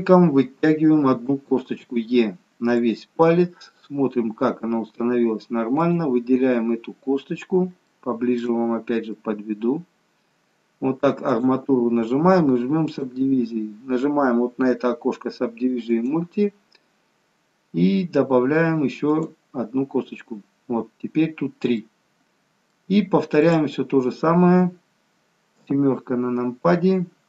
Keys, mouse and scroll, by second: 1.2 e, 3.3 middle click, 5.9 click, 7.9 shift+scroll up 1, 8.0 shift+middle click, 8.7-9.3 scroll up 2, 9.3 middle click, 11.5 click, 16.0 click, 19.1 click, 21.8 middle click, 23.5 click, 25.6 KP_7.